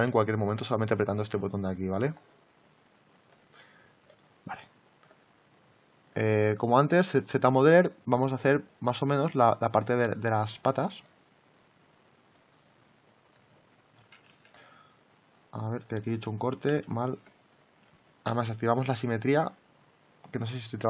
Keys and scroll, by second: 14.3 ctrl+z, 16.3 ctrl+z, 18.2 x.